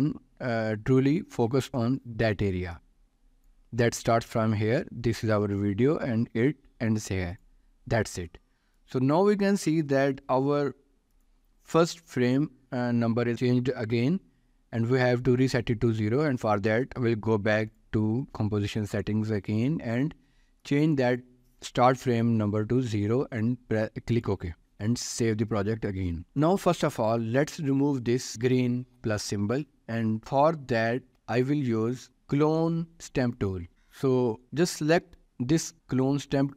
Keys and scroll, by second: 10.7 ctrl+s, 23.3 0, 25.7 ctrl+s.